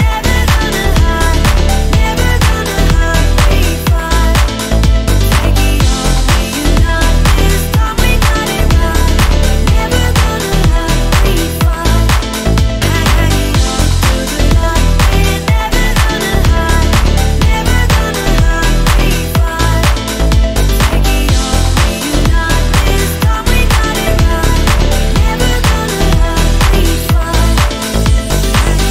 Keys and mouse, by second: 0.0 click, 0.7 ctrl+s, 2.2 click, 3.5-4.7 drag, 6.2-7.7 drag, 8.0 click, 8.5 shift+middle click, 8.9 shift+middle click, 9.8 shift+middle click, 10.4 shift+middle click, 10.8-12.5 drag, 12.6 shift+middle click, 12.9 shift+middle click, 14.5-15.1 drag, 24.1-25.3 drag, 26.2-28.9 drag.